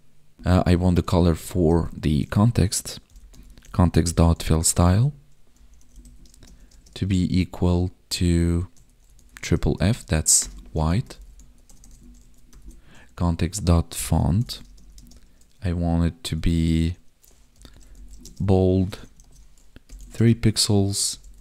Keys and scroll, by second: 6.3 space, 6.7 space, 9.4 Right, 14.6 space, 14.9 space, 18.2 space, 20.1 space.